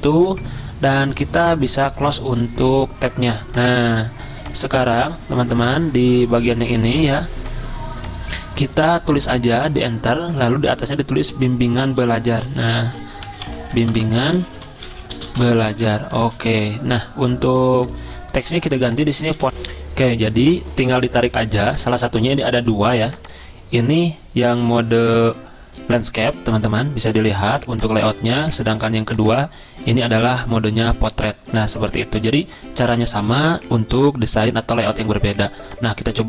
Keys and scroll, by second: 10.2 Return, 12.1-19.7 typing.